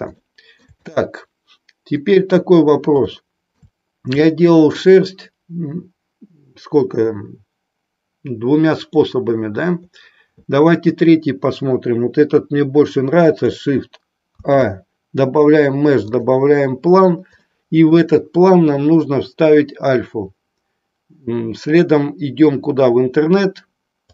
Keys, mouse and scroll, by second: 0.2 shift+middle click, 0.7-1.9 middle drag, 3.0-3.5 shift+middle drag, 4.2-4.7 shift+middle drag, 14.2 shift+a, 17.4-17.9 middle drag.